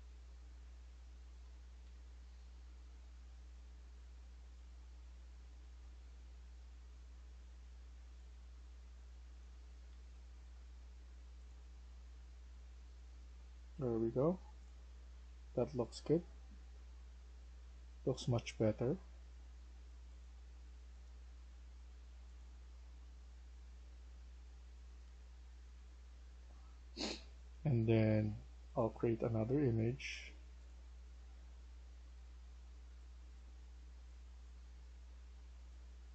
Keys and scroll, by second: 1.3-1.7 typing, 3.1 typing, 6.5 ctrl+z, 9.4-9.8 typing, 30.7-31.1 typing, 35.5-36.1 typing.